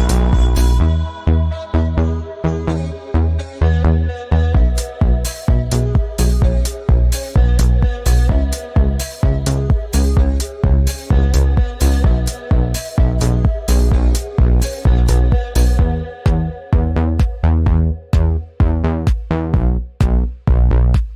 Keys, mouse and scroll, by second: 0.5 click, 1.2 Down, 2.3 click, 3.7 right click, 4.4 click, 7.6 space, 8.0 click, 9.4 ctrl+alt+2, 10.3 click, 11.5 ctrl+z, 12.2 click, 13.7 right click, 16.8 click, 18.5 click.